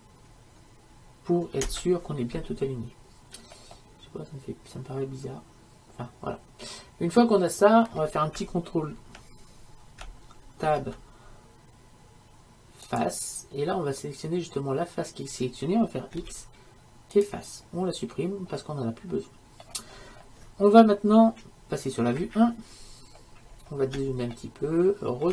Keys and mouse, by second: 3.8-10.7 middle drag, 10.7 ctrl+Tab, 16.3 x, 18.7-19.8 middle drag, 22.3 KP_1.